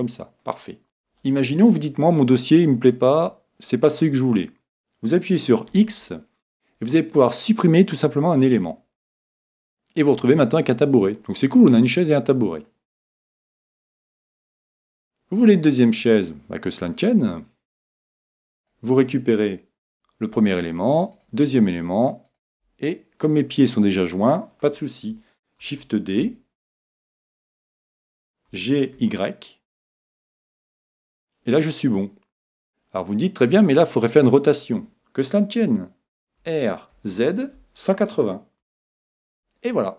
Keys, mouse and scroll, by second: 0.0-2.6 middle drag, 2.9 right click, 5.7 x, 9.0-10.9 middle drag, 12.4-17.9 middle drag, 18.6 right click, 21.2-24.0 right drag, 23.0-24.9 middle drag, 25.6 shift+d, 30.7-32.5 drag, 32.0-33.9 middle drag, 36.4 r.